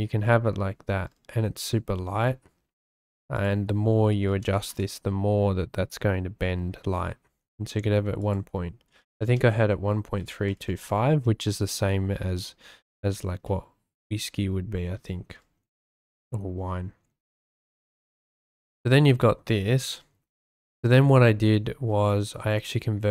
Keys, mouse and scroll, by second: 2.2 middle click, 3.3-4.7 drag, 8.2-10.8 drag, 13.4-14.9 drag, 20.8 shift+click.